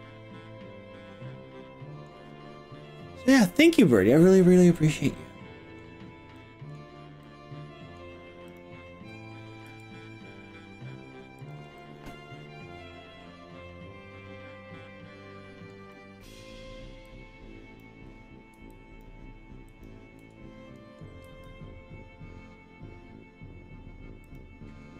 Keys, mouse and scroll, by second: 2.1 scroll up 1, 3.8-4.7 scroll up 1, 4.8-5.9 middle drag, 6.4 middle click, 7.2 middle click, 8.5 click, 9.7 g, 11.5 click, 11.8-15.7 middle drag, 12.6 g, 15.9 middle click, 17.1 click, 18.7 shift+click, 19.7 shift+click, 20.2 middle click, 21.3 s, 24.3 click.